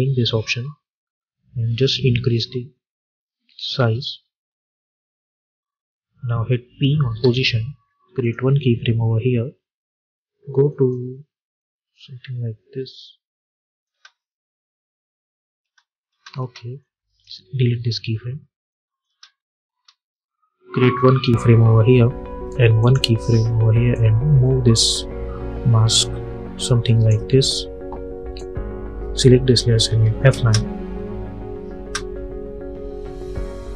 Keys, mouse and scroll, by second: 4.2 space, 7.1 p, 8.1 click, 10.6-13.8 drag, 13.8 space, 16.7-18.6 drag, 19.0 space, 21.0-27.3 drag, 27.3 j, 28.2-29.8 drag, 29.8 F9, 30.2 space, 33.6-33.7 drag.